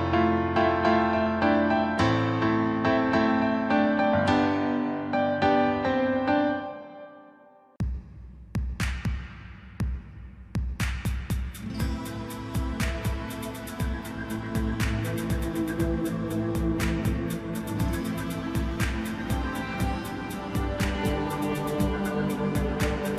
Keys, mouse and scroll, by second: 0.8-2.2 drag, 4.5-5.4 scroll up 2, 5.4 click, 5.7-6.8 middle drag, 6.8 drag, 7.8 drag, 8.6-9.4 drag, 9.4-9.8 scroll down 4, 11.0 click, 14.1-15.9 scroll down 3, 15.9-17.4 drag, 17.4 KP_1, 18.8 click, 19.1-19.5 scroll up 2, 19.5 scroll down 3, 19.7-22.8 middle drag.